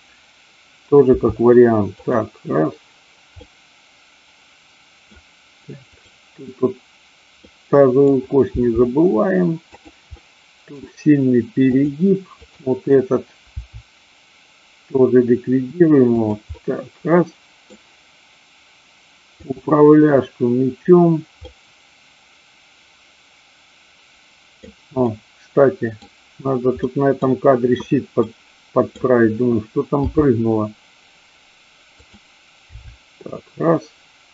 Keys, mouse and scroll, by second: 1.1 r, 2.1 click, 3.5-5.1 middle drag, 6.0-7.0 drag, 7.3-8.1 middle drag, 8.5 r, 9.7 click, 10.2 middle click, 11.7 click, 13.6 r, 16.2 click, 16.6-17.7 middle drag, 21.5-24.6 middle drag, 25.0-26.0 middle drag, 26.9 middle click, 28.2-29.0 middle drag, 30.1 g, 32.7 r.